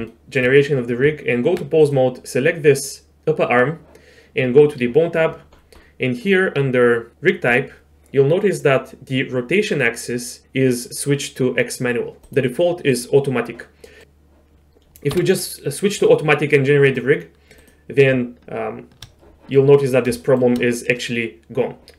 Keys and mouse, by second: 0.1 shift+drag, 1.1 Tab, 1.8 click, 4.6 click, 12.2-13.0 drag, 13.9 middle click, 15.1 q, 16.9 click, 17.6 click, 20.3 shift+click.